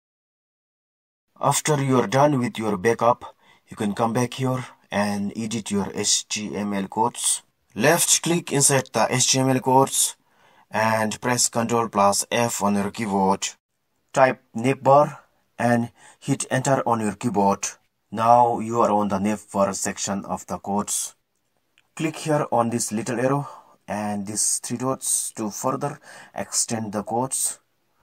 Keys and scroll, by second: 13.2-15.1 typing, 16.9 Return.